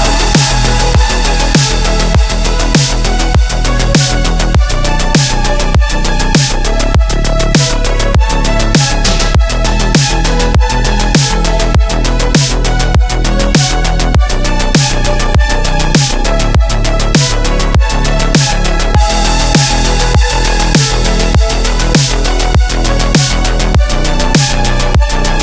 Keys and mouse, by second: 0.3 3, 0.8-1.9 middle drag, 2.8 x, 4.6 click, 5.5 Tab, 6.0-6.9 drag, 7.1 shift+click, 7.2 shift+middle click, 7.6-8.0 middle drag, 8.6 Tab, 9.2 3, 9.5 click, 10.2 x, 11.4-12.4 middle drag, 12.7 click, 13.2-14.6 middle drag, 13.5 x, 15.2 shift+middle click, 15.9 shift+middle click, 18.8 shift+middle click, 20.0 middle click, 21.2 middle click, 24.3 middle click, 25.1 middle click.